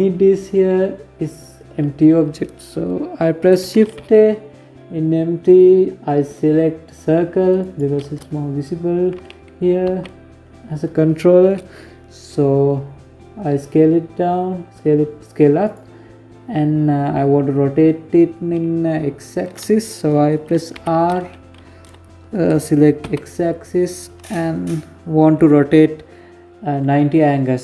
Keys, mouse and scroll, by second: 2.8 shift+a, 6.6 shift+a, 8.8 s, 19.6 r.